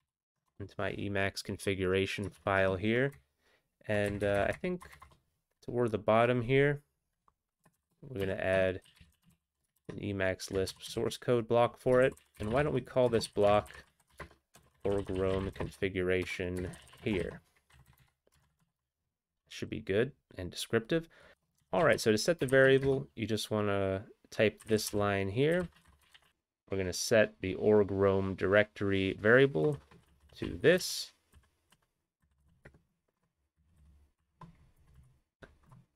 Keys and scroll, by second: 0.2 ctrl+n, 0.5 Return, 2.4 alt+>, 3.1 Up, 3.6 Up, 3.7 Up, 3.8 Up, 4.0 Up, 4.6 Up, 4.8 Return, 5.0 Up, 5.0 Return, 7.7-9.9 typing, 8.5 Tab, 9.9 ctrl+n, 10.7 ctrl+x, 11.5 ctrl+s, 12.0 ctrl+p, 12.4 ctrl+p, 12.4 ctrl+o, 12.6 ctrl+o, 12.6 ctrl+n, 13.9-15.5 typing, 16.7-18.6 typing, 18.6 Return, 21.3 typing, 23.0 typing, 24.6-26.3 typing, 29.7-33.9 typing, 35.1 typing.